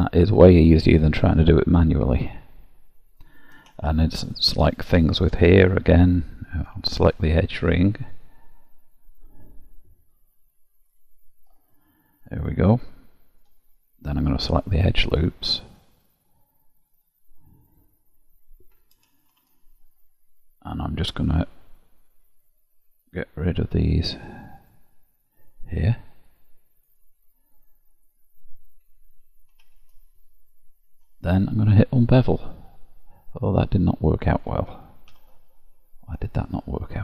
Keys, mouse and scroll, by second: 3.1 click, 3.8 shift+middle click, 4.4 middle click, 6.9 ctrl+alt+click, 8.1 click, 10.9 ctrl+alt+click, 11.7 middle click, 15.1 click, 19.3 shift+z, 21.1-21.6 scroll down 1, 21.6-21.9 scroll down 1, 22.4 shift+click, 23.1 shift+click, 23.9 shift+click, 24.7 shift+click, 25.7 shift+click, 26.3 shift+click, 26.9 shift+click, 27.5 shift+click, 28.0 shift+click, 29.6 shift+z, 30.3 scroll down 1, 32.1 click, 33.2 middle click, 35.1 ctrl+z, 36.1 middle click.